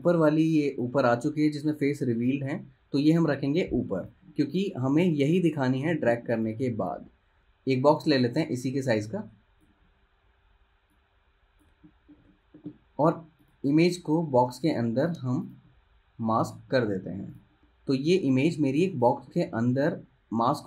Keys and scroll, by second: 1.2 super+z, 14.5 super+z, 17.6 v, 19.6 super+z.